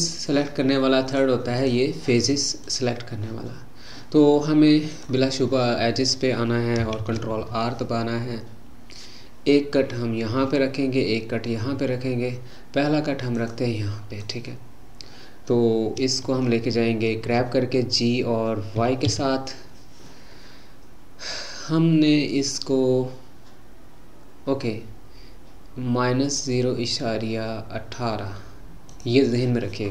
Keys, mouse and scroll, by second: 0.0 click, 1.1-2.8 drag, 4.9-7.0 drag, 7.0 ctrl+r, 18.8 g.